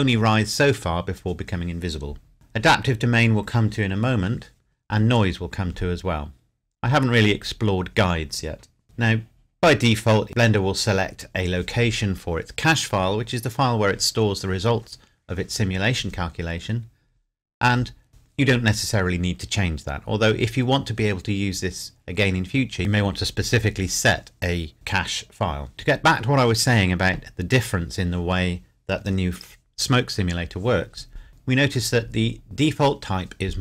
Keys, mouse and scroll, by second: 8.8-10.5 scroll down 1, 19.8-21.8 scroll down 1.